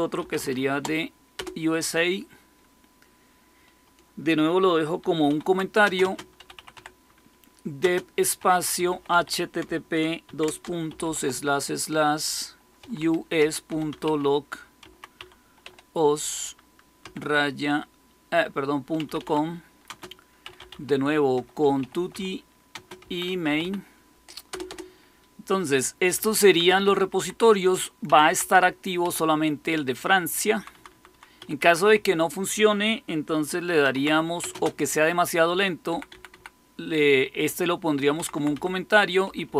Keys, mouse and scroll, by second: 0.0-1.3 typing, 5.2-11.0 typing, 12.5-16.9 typing, 18.7-24.0 typing, 24.4 Return, 24.6 Return, 25.8-32.4 typing, 27.3 Up, 33.5-34.5 typing, 35.6-36.3 typing, 38.1-39.5 typing.